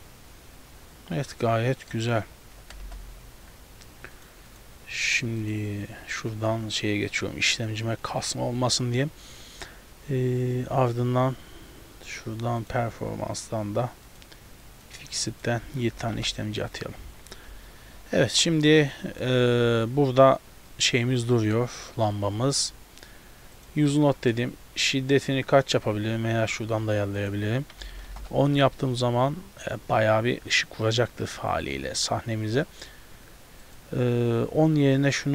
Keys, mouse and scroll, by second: 2.2 scroll down 1, 2.9 KP_0, 4.2 click, 4.5 click, 5.1 click, 12.7 click, 13.0 scroll down 1, 14.1 click, 15.4 click, 17.1 z, 17.6 a, 17.7 a, 18.3 ctrl+b, 20.8 right click, 22.6 click, 23.0-23.6 scroll down 1, 23.6 click, 23.6 scroll down 1, 24.2 middle click, 24.5 scroll up 1, 27.2 click, 33.7 click.